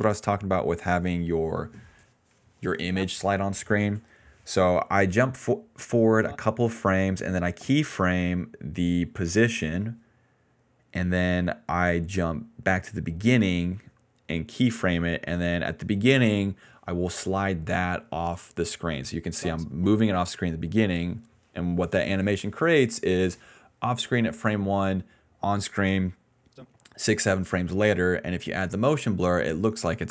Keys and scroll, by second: 2.8 space, 3.1 space, 3.8 ctrl+c, 4.3 alt+v, 19.2 space, 19.8 space, 20.9 ctrl+c, 21.3 alt+v, 27.2 alt+v.